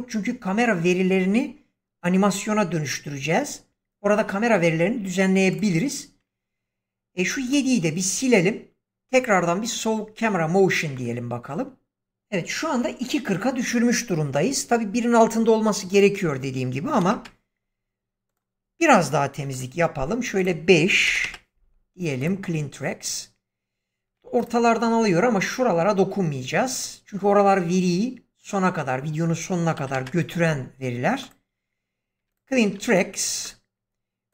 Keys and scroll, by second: 7.1 x, 16.8 6, 17.0 Return, 19.3 x, 20.9 5, 21.1 Return, 24.0 x, 29.6 4, 29.8 Return, 32.1 x.